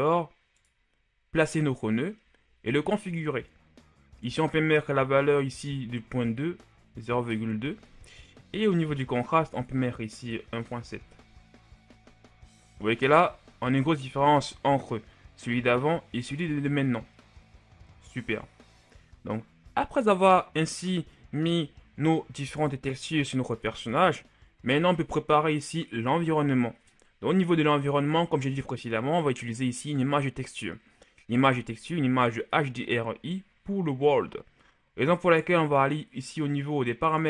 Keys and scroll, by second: 5.7 KP_Decimal, 6.2 KP_2, 7.2 Return, 10.2 KP_1, 10.6 KP_Decimal, 11.0 KP_7, 11.4 Return, 13.1 a.